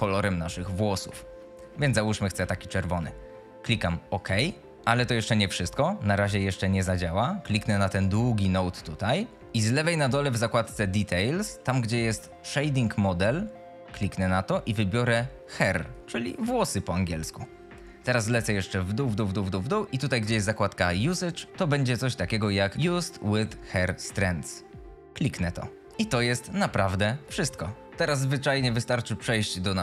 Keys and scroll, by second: 5.5 F22, 26.0 F22.